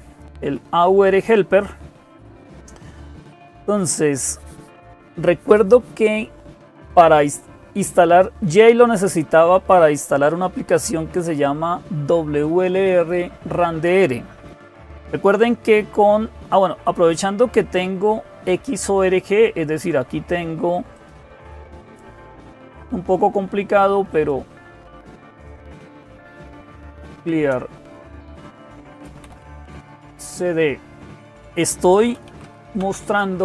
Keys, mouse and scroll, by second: 0.0-33.4 typing, 20.7 click, 22.2 click, 23.9 click, 27.1 Return.